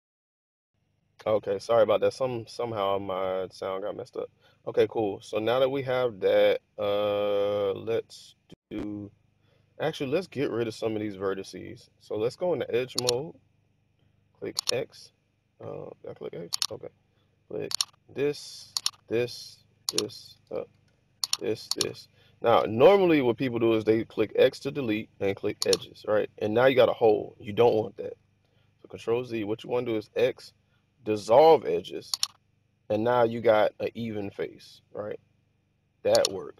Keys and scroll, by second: 20.5 super+z, 22.5 x, 28.1 super+z, 29.9 x.